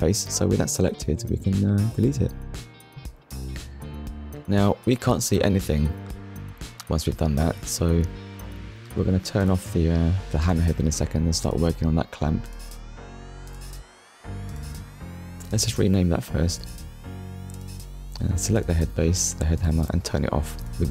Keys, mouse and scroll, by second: 0.1 click, 2.0 Delete, 2.9 click, 4.4 Tab, 7.5 right click, 8.4 middle click, 9.5 click, 11.7 click, 13.1-14.9 typing, 15.3 Return, 17.8 click, 20.3 click.